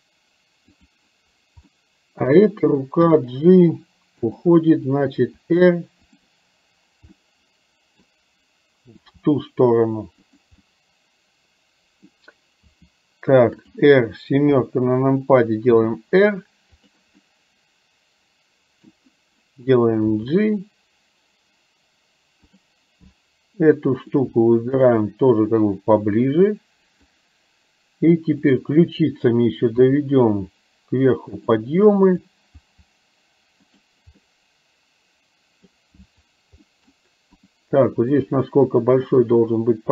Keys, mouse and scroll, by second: 0.8 click, 1.8 middle click, 3.1 g, 5.3 r, 7.1-8.1 middle drag, 9.1 g, 10.6-12.2 middle drag, 12.7 r, 14.6 KP_7, 15.8 r, 17.2-19.1 middle drag, 20.2 g, 24.0 click, 24.8 shift+click, 25.8-27.2 drag, 28.6 click, 30.0 r, 32.2 click, 32.6 r, 34.3-35.7 middle drag, 36.7 middle click, 37.3 click, 38.0 middle click, 39.1 shift+click.